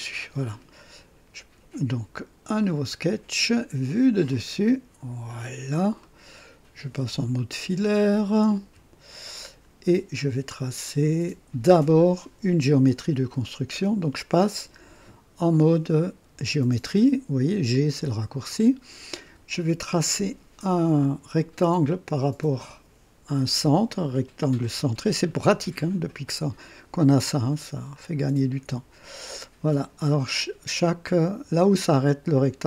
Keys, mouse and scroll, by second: 2.6 click, 4.3 click, 5.3 click, 6.0 middle click, 8.6 1, 17.7 click, 20.9 click, 24.1 click, 25.9 scroll up 2, 27.9 click.